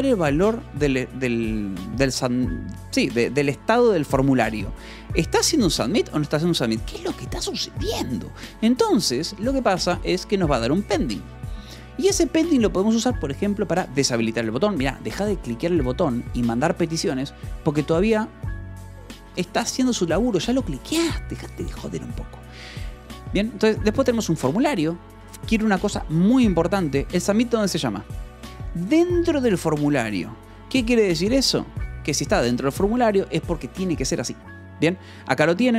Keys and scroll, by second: 8.9 Escape, 9.9 shift+p, 10.4 v, 11.0 e, 11.6 Escape, 11.8 j, 13.1 shift+v, 13.5 j, 21.7 Escape, 23.0 j, 23.7 j, 25.1 Escape, 26.8 k, 27.7 shift+v, 28.4 Escape, 28.6 k, 29.4 shift+v, 30.5 Escape, 31.8 1, 32.5 k, 33.6 Escape, 34.7 k, 35.6 shift+v.